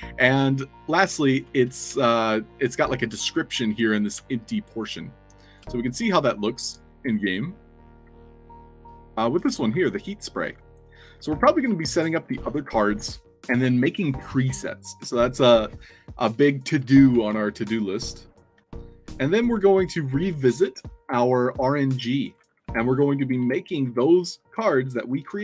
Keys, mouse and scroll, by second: 1.9 alt+drag, 3.6 click, 4.4-5.5 shift+drag, 6.1 shift+click, 6.7 Tab, 8.0-11.8 typing, 19.5 s, 20.3 a, 20.6 w, 22.3-23.9 typing.